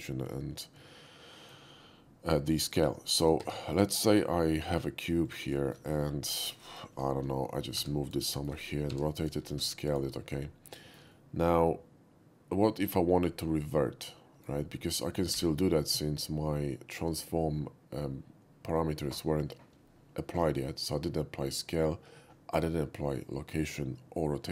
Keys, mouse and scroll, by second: 0.8-1.5 shift+middle drag, 3.4 shift+a, 5.2 click, 5.7 shift+middle click, 5.9 shift+middle click, 6.0 shift+middle click, 6.7 shift+middle drag, 7.7 g, 8.1 click, 8.4 middle click, 8.9 scroll up 1, 8.9 r, 9.2 click, 9.5 s, 9.5 a, 9.9 click, 10.8 shift+middle drag, 11.1-14.4 shift+middle drag, 15.4 n.